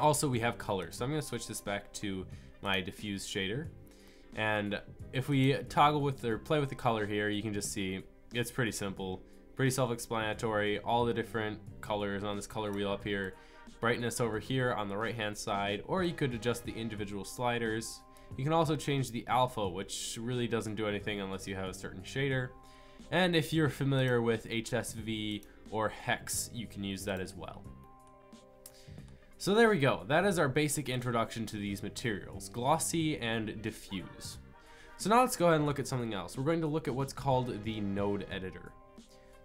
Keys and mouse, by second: 4.6 click, 7.7 middle click, 10.0 middle click, 10.7 middle click, 11.9 middle click, 21.1 middle click, 27.1-28.9 drag, 28.9-31.6 middle drag, 31.6-34.4 drag, 36.4 t.